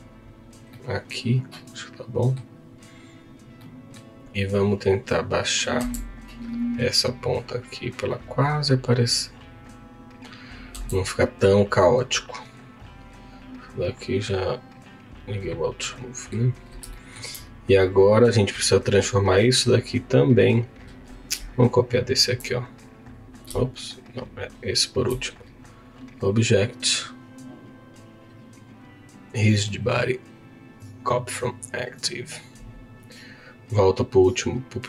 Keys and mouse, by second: 0.8-2.4 middle drag, 3.6 middle click, 5.8 Tab, 6.7 click, 10.7 Tab, 12.3 click, 12.7 click, 15.8 middle click, 16.9 shift+middle click, 18.8 click, 21.7 shift+click, 25.9-31.4 drag, 32.0 click, 33.3 click.